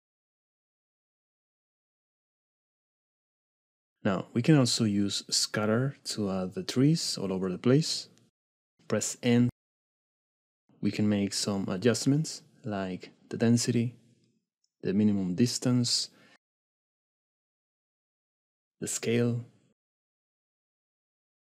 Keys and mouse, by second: 3.2 ctrl+Tab, 4.7-5.0 drag, 6.0 j, 7.9 middle click, 11.8-15.3 drag, 20.0-21.5 shift+middle drag.